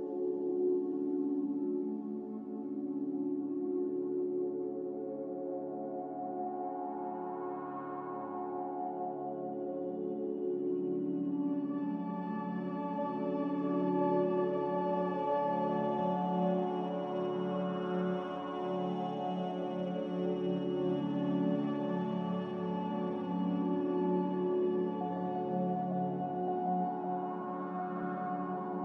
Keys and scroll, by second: 5.9 z, 15.5 c, 15.6 z, 24.8 Delete.